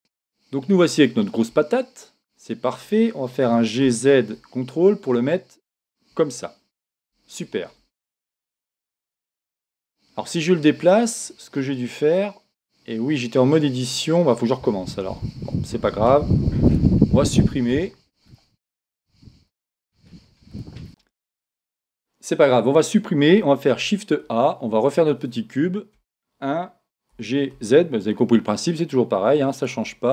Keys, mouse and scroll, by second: 0.0-1.8 middle drag, 1.8 KP_1, 3.4 g, 7.0 click, 7.9-11.1 middle drag, 11.4-12.6 scroll down 1, 12.6-13.3 scroll down 1, 13.3 scroll down 1, 15.1 Tab, 16.3 x, 23.7 shift+a, 25.9 KP_1, 27.1 g, 29.6-30.1 drag.